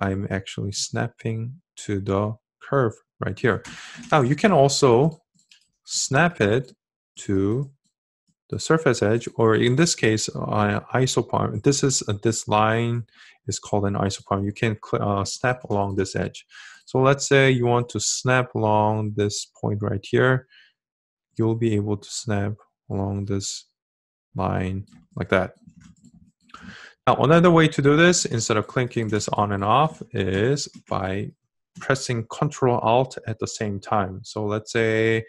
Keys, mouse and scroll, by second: 30.6-35.2 ctrl+alt+drag.